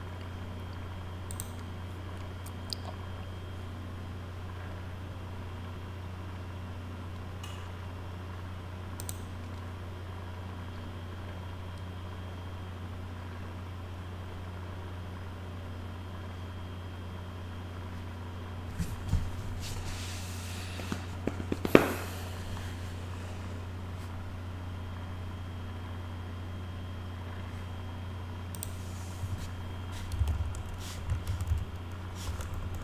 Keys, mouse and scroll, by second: 1.3 click, 9.0 click, 28.5 click, 29.9-32.8 typing.